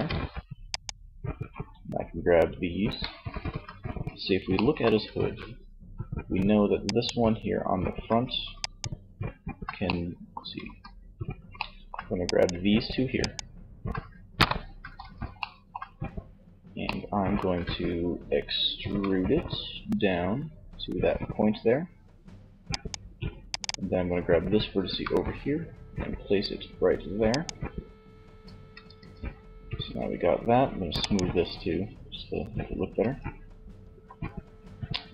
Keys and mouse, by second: 2.6 z, 9.6 z, 10.6 middle click, 13.4 KP_1, 13.7 z, 15.1 middle click, 18.2 e, 22.1-23.8 drag, 22.7-24.8 right drag, 23.8 g, 26.6 click, 27.8 z, 28.2 Tab, 32.1 Tab, 32.9 z.